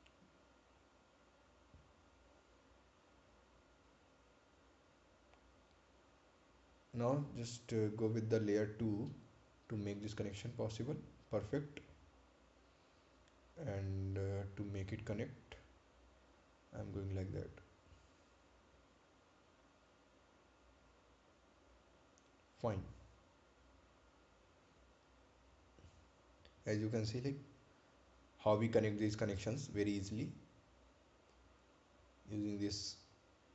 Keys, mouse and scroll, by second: 3.0 click, 5.9 click, 12.9 click, 18.2 click, 22.5 click, 26.2-26.5 scroll down 1, 27.8 right click, 28.5 ctrl+click, 29.9 scroll up 1, 30.5-31.0 scroll down 1.